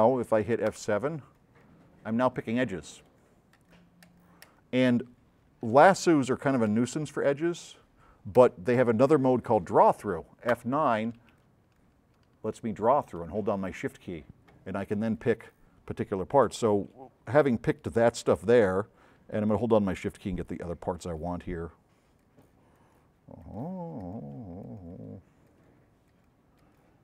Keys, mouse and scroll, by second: 0.8 F7, 1.4 click, 2.4-3.4 drag, 6.8 F8, 7.2-7.8 drag, 8.4 click, 10.6 F9, 15.3 shift+click, 19.6-20.0 shift+drag, 20.3 shift+click, 21.0 shift+click, 22.5 shift+drag, 24.0 shift+click, 25.6 shift+click, 26.2-26.6 shift+drag, 26.6-27.0 shift+drag.